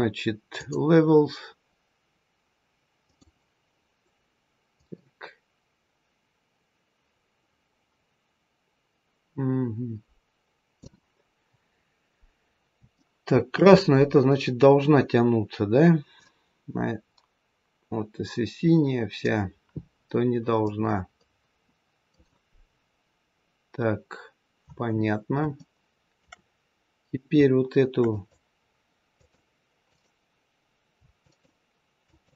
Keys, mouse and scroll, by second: 2.9 click, 4.7 click, 11.7-12.7 scroll up 2, 12.9 shift+middle click, 16.1 click, 20.6 click, 23.3-25.4 scroll down 2, 25.5 shift+middle click, 28.0 click, 29.1 click, 29.7 right click, 31.9 shift+click.